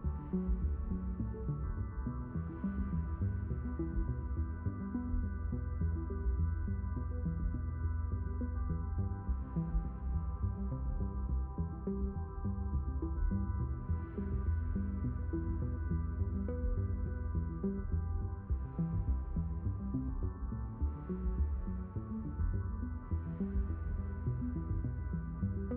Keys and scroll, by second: 20.3 s.